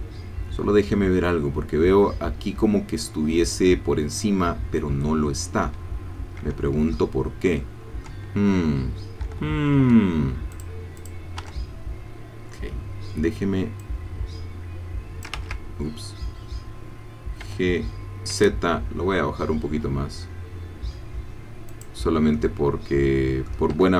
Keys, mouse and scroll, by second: 6.9 middle click, 7.1-8.2 drag, 9.2 Escape, 10.6 click, 11.0 click, 11.4 Tab, 13.8-15.4 drag, 15.4 ctrl+z, 17.4 g, 18.3 z, 21.7 click, 22.1-22.4 scroll down 1, 22.4-23.6 drag, 23.8 Tab.